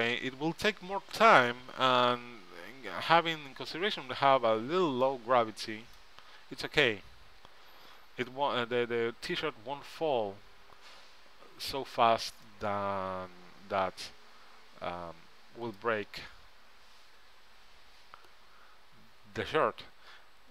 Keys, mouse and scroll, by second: 5.9-7.2 middle drag, 8.6-10.2 middle drag, 13.9-15.4 middle drag.